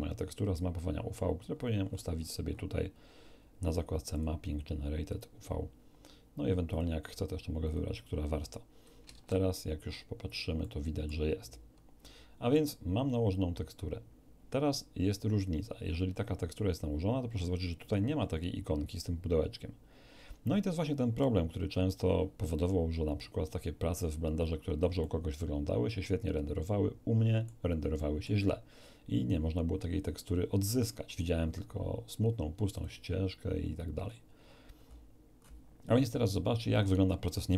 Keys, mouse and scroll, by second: 1.5 scroll down 2, 4.1 click, 5.1 click, 6.7 click, 7.6 click, 9.1 shift+z, 10.3 scroll down 2, 10.6-11.3 middle drag, 12.0-12.7 middle drag, 24.1-24.5 scroll down 2, 25.0-27.6 middle drag, 27.9 middle click, 32.7 click, 33.3-33.9 scroll down 2, 34.1-34.7 scroll down 4, 35.4 scroll up 2.